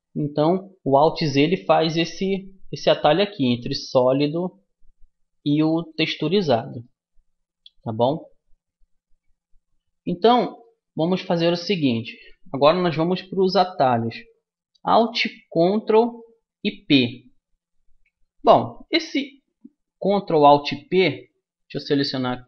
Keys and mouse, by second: 2.0-3.8 drag, 3.8 middle click, 6.8-15.8 middle drag, 21.8-22.4 right drag.